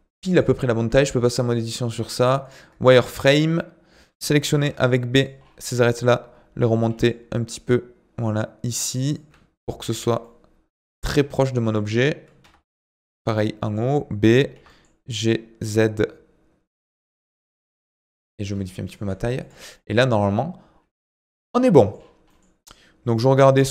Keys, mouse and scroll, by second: 0.3 click, 0.9 Tab, 1.5 click, 1.9 z, 5.4-5.8 scroll up 5, 5.8-6.9 shift+middle drag, 6.9 g, 10.2-11.3 shift+middle drag, 11.3 click, 11.6 g, 13.1 b, 14.5 g, 17.8-18.4 scroll down 6, 18.4 Tab, 18.6 middle click, 19.0 z, 19.7-21.2 middle drag, 21.2 ctrl+s, 21.4 middle click, 21.9-22.3 scroll up 4, 22.3-23.7 middle drag.